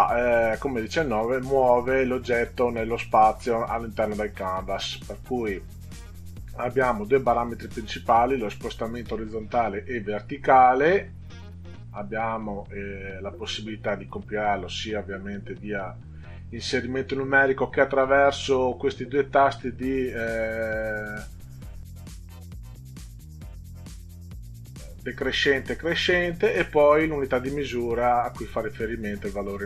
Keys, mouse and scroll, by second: 14.1 click, 27.0 click.